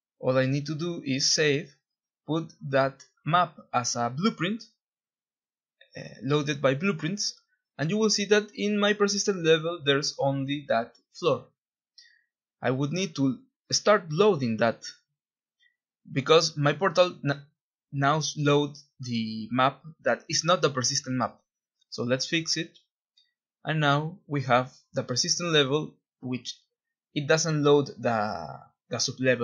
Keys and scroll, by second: 5.1 F2, 5.7 F3, 6.1 F2, 8.5 F1, 10.9 d, 11.4 ctrl+b, 14.8-16.3 typing, 16.6 Escape, 18.1 ctrl+e, 19.1 End, 19.5 space, 19.5 p, 19.5 Return, 21.2-22.7 typing, 23.8 F1, 25.4 Escape, 25.7 typing.